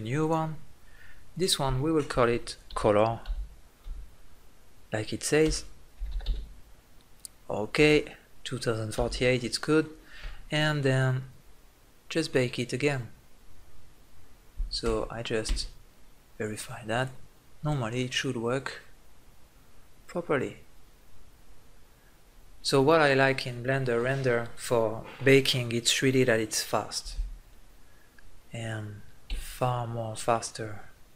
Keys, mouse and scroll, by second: 14.7 Tab, 15.3 Tab, 16.8-29.0 drag, 29.0 Tab, 30.1-31.1 middle drag.